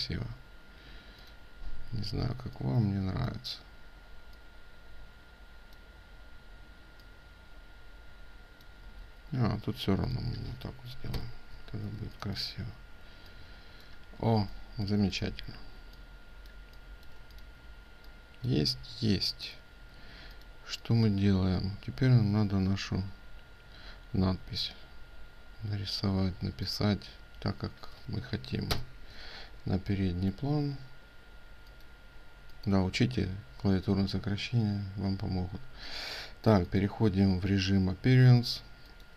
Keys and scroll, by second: 8.5 ctrl+z, 11.4 ctrl+space.